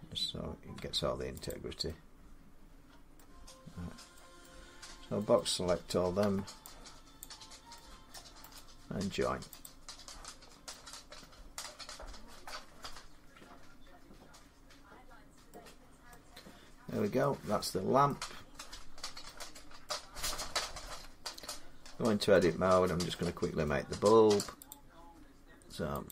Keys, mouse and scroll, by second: 0.6 Tab, 1.3 click, 2.8 scroll down 3, 3.0 middle click, 4.3 middle click, 4.7-5.0 scroll down 3, 5.2 middle click, 6.0 b, 7.0 click, 7.9 middle click, 8.4 right click, 9.5 click, 10.3 scroll up 4, 12.4 scroll, 14.6 middle click, 15.3 middle click, 15.6 middle click, 15.6 middle click, 16.7 scroll down 2, 17.0 middle click, 17.9 middle click, 18.3-18.8 scroll up 4, 18.8 scroll down 3, 19.2 scroll, 19.7 middle click, 20.7 Tab, 21.9 scroll up 1, 22.1 middle click, 22.5 scroll down 3, 23.5 scroll up 1, 24.5 click, 24.7 middle click, 25.9 click.